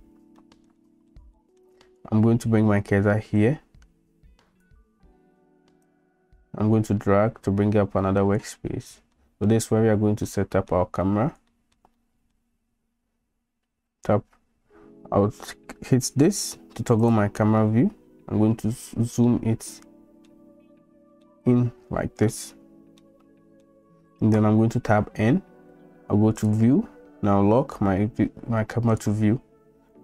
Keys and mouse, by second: 0.4 middle drag, 0.8 middle click, 1.3 shift+middle drag, 3.5-4.7 right drag, 6.0-7.0 middle drag, 7.0-8.4 drag, 9.2 middle drag, 10.4 middle click, 11.5-11.8 shift+middle drag, 12.1 middle click, 13.8 n, 19.4-20.3 shift+drag, 21.3-22.4 shift+drag, 23.1 shift+click, 24.9 n, 26.4 click, 28.9 click, 29.9 n.